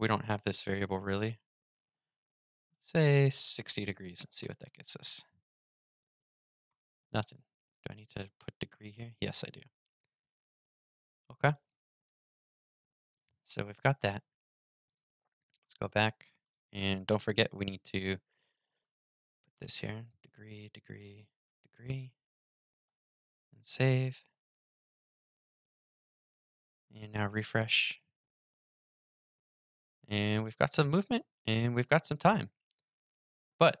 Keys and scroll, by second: 22.6 super+s, 27.0 super+r.